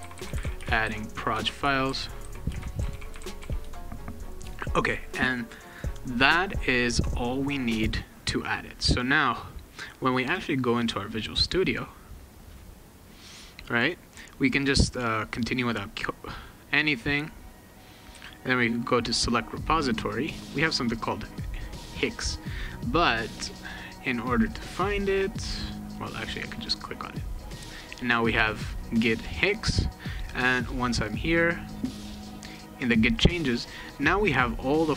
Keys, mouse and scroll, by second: 0.0-3.9 typing, 5.0 middle click, 9.6 click, 10.9 click, 15.4 click, 18.3 click, 25.9 click, 30.5 click, 31.8 click, 34.5-34.9 drag.